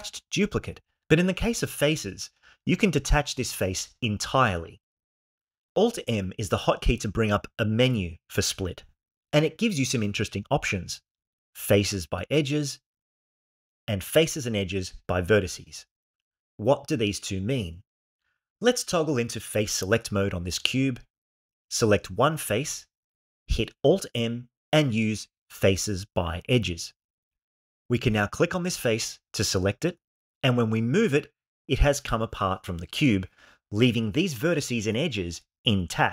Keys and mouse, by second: 0.1 y, 1.4 g, 6.4 alt+m, 20.9 3, 22.6 click, 24.9 alt+m, 28.0 click, 29.5 g.